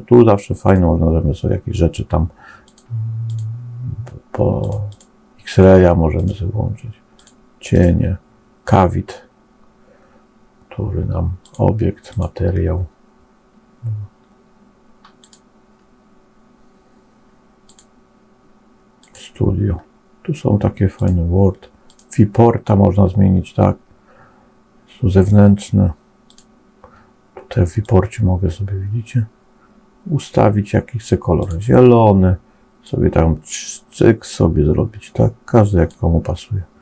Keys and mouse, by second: 15.2-36.8 drag.